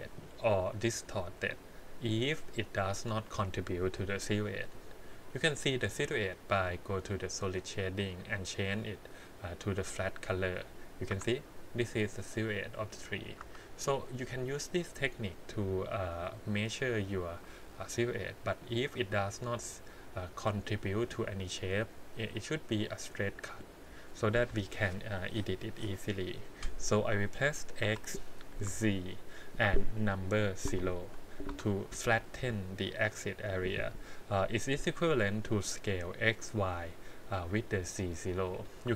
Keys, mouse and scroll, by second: 7.8 click, 11.1 Tab, 13.4 Tab, 14.4-16.2 drag, 17.4 r, 27.8 s.